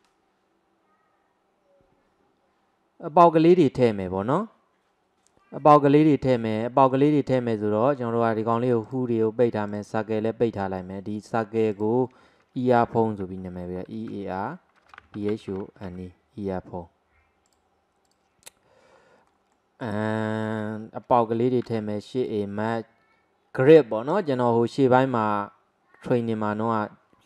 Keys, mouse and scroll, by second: 6.8 scroll down 1, 7.0-8.9 middle drag, 8.9 click, 9.7 click, 11.6-14.8 drag, 18.1 click, 19.0-19.3 scroll up 1, 19.3-21.7 middle drag, 21.7 shift+a.